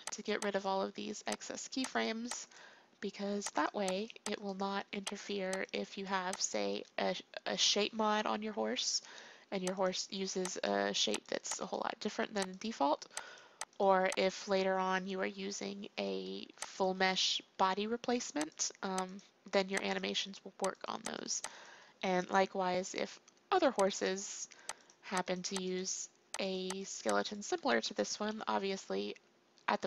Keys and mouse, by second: 8.4 Delete, 9.7-15.3 drag, 15.3 Delete, 16.7-18.6 drag, 18.7-22.5 drag, 22.5 Delete, 25.7-28.1 drag, 28.1 Delete.